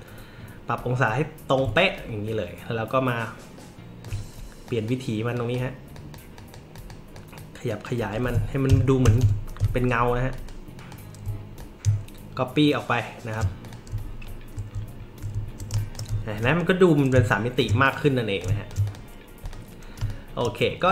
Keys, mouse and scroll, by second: 1.5-4.0 alt+drag, 4.6 drag, 5.3 drag, 5.9 drag, 6.4 click, 6.7 click, 7.1 click, 7.7 click, 8.7 ctrl+[, 10.3 click, 10.7 click, 11.5-13.3 alt+shift+drag, 13.6 click, 14.2 alt+scroll up 1, 14.9 alt+scroll up 1, 15.1-15.4 alt+scroll down 1, 15.4 alt+scroll up 1, 15.7 space, 15.7 click, 16.9 shift+click, 17.8 drag, 18.4 shift+drag, 18.9 drag, 19.4 click, 19.9 space, 20.1 click.